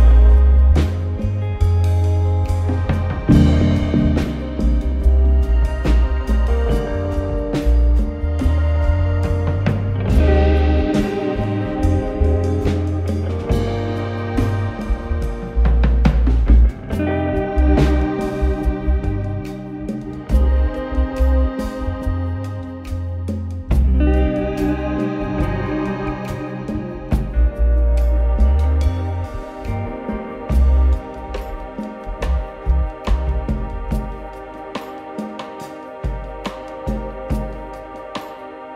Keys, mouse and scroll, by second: 2.9 middle click, 4.9 scroll, 5.1 click, 5.3 click, 5.6-6.5 typing, 6.0 scroll, 7.8-13.5 Tab, 7.8-8.6 typing, 7.9 scroll, 9.7 click, 11.0 click, 12.5 click, 14.1 click, 15.7 click, 17.5 click, 19.7 click, 20.5 click, 20.6 click, 22.1 click, 23.7 click, 25.7 click, 26.6 click, 33.6 alt+middle click.